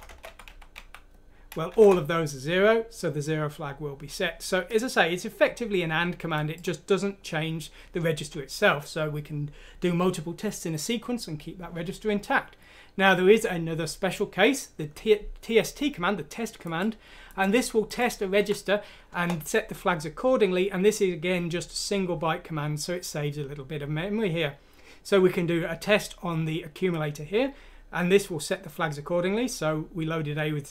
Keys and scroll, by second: 1.7 F6, 1.7-2.0 typing, 1.7 Return, 18.3 F6, 19.1 Return.